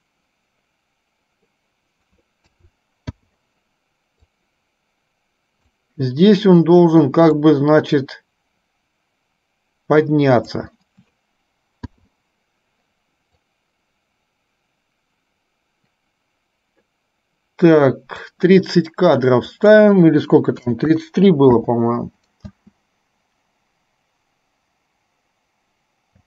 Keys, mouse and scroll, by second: 2.6 a, 4.5-5.9 drag, 7.5-10.8 drag, 12.1 i, 13.6-18.5 drag, 19.6-21.8 drag, 20.9 KP_3, 22.6 space.